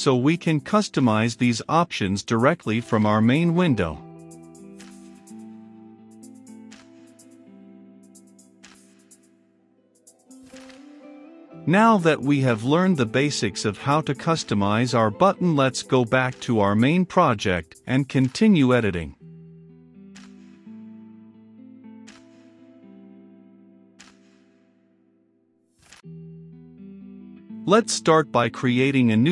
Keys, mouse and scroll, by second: 11.4-25.3 drag, 25.3 middle click, 26.1-27.5 right drag, 27.5-29.3 drag.